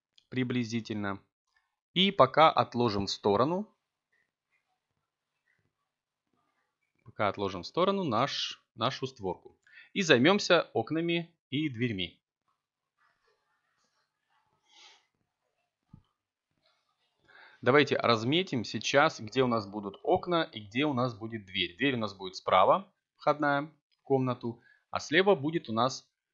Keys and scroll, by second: 7.9 z, 10.8 Tab.